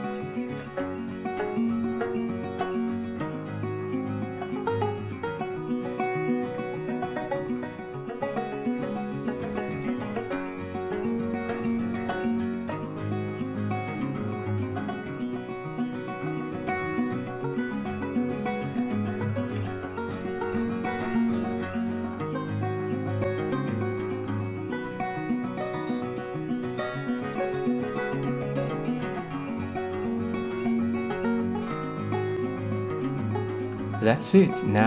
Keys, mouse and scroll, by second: 13.0-14.3 drag, 15.9-17.2 drag, 27.7-28.8 middle drag, 28.9-30.0 middle drag, 30.8-32.7 middle drag.